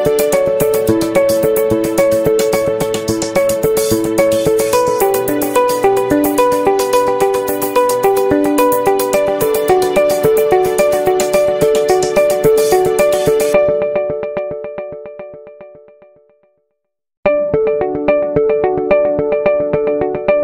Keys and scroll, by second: 5.2 Right, 6.4 i, 18.6 v.